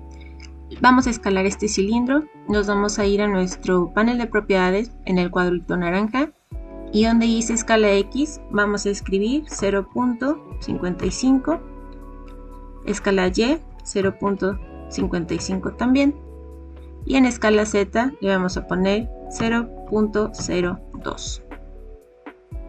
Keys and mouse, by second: 8.0-12.1 drag, 10.6 KP_5, 13.0-16.3 drag, 17.8-21.4 drag.